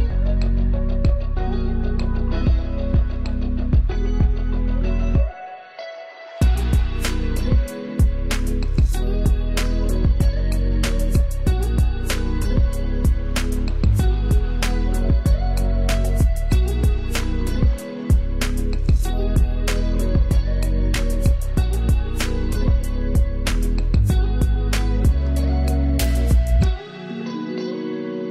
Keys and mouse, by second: 2.9-5.3 ctrl+drag, 5.3 ctrl+z, 5.9-11.4 shift+drag, 11.4 Down, 12.1-14.5 drag, 14.5 Left, 15.8-20.4 drag, 20.4 ctrl+space, 21.8 click, 22.9 click.